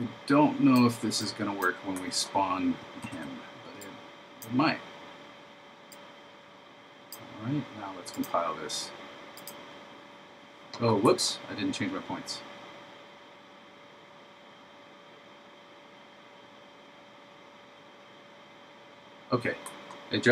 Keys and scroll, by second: 3.1 super+v.